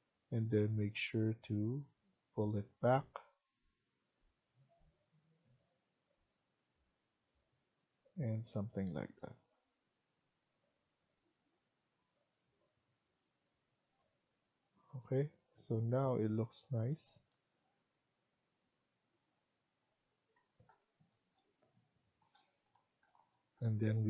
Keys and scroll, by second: 20.3 Escape.